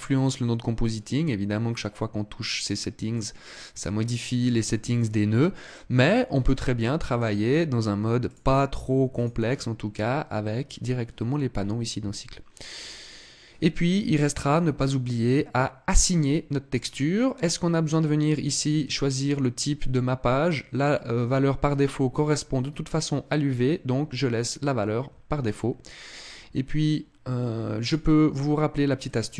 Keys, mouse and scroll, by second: 5.7 click, 8.9 click, 16.5 click, 18.6 click, 22.0 click, 27.5 click, 28.8 click.